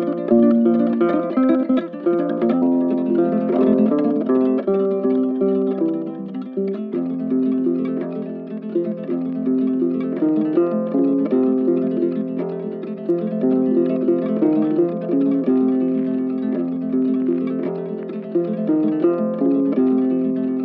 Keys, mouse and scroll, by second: 1.3 double click, 3.6 double click, 5.7 ctrl+z, 5.8 ctrl+right click, 6.8 ctrl+z, 8.7 ctrl+z, 9.3 right click, 10.2 double click, 14.1 right click, 14.9 double click, 18.7 scroll down 1, 19.7 double click.